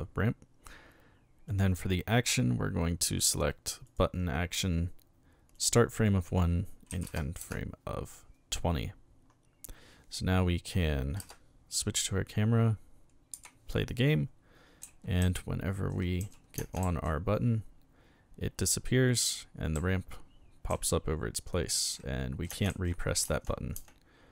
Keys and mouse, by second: 1.5 click, 3.9 click, 5.5 click, 5.9 click, 7.1 KP_0, 7.4 Return, 13.3 p, 14.8-16.8 typing, 19.7 d, 20.7 a, 21.9-24.3 typing.